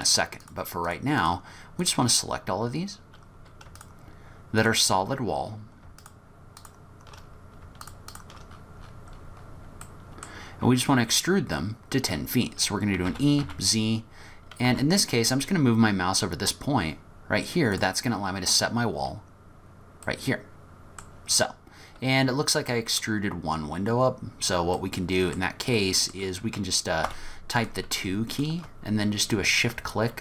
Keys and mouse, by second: 1.2 shift+click, 1.8 shift+click, 3.8 shift+click, 5.1 middle click, 6.0 shift+click, 8.1 shift+click, 9.8 middle click, 13.1 e, 20.2 middle click, 22.8 middle click, 24.8 middle click, 25.8 middle click, 27.1 2, 27.6 click.